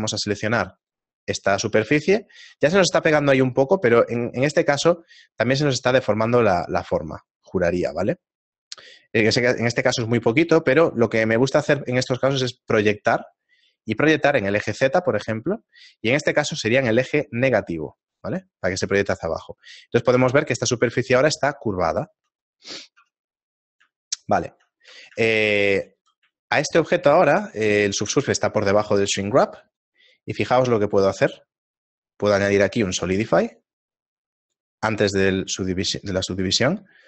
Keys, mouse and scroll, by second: 2.4 z, 3.1 shift+middle click, 6.1 click, 6.5-15.2 click, 15.2 shift+middle click, 18.0 click, 19.1 shift+middle click, 24.0 Tab, 24.6 shift+middle click, 25.5 Tab, 25.5 shift+middle click, 26.9 shift+middle click, 26.9 z, 29.8 click, 30.4 click, 34.6 click, 36.2 click.